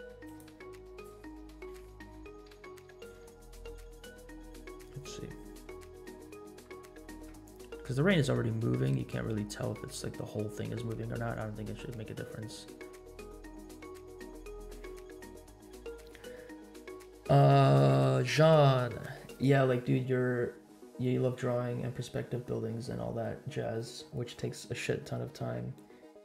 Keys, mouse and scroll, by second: 0.6-1.2 drag, 1.6 v, 3.8 space, 5.9-6.3 scroll up 2, 6.9 shift+middle click, 7.5 scroll up 1, 8.4-8.9 scroll down 2, 9.6 scroll down 2.